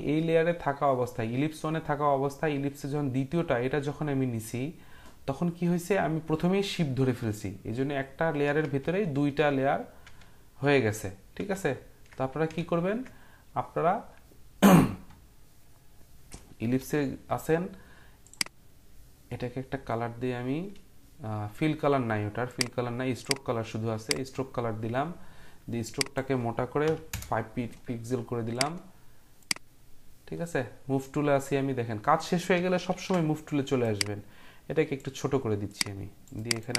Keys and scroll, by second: 8.6 ctrl+z, 9.1 ctrl+z, 10.0 ctrl+z, 10.6 ctrl+z, 11.4 ctrl+z, 12.6 ctrl+z, 16.8 u, 26.8 5, 27.1 Return, 32.9 ctrl+t.